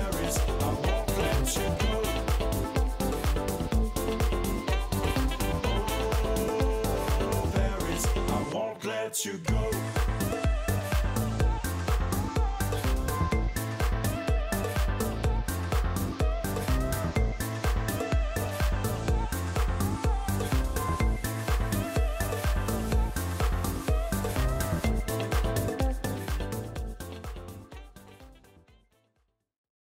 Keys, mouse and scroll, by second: 1.6 Up, 1.6 Left, 1.8 click, 2.5 Down, 2.5 click, 2.8 Left, 3.2 right click, 3.7 click, 5.2 right click, 5.8 right click, 6.7 Up, 7.5 right click, 8.0 click, 8.7 click, 9.5 middle click, 9.7 scroll down 1, 10.1 right click, 10.9 click, 11.8 scroll down 2, 12.8 Right, 12.9 scroll down 1, 13.1-16.0 right drag, 16.0 scroll down 1, 16.0 right click, 16.5 Right, 16.5 click, 18.0 right click, 18.1 right click, 18.4 click, 19.7 click, 20.8 click, 22.8 click.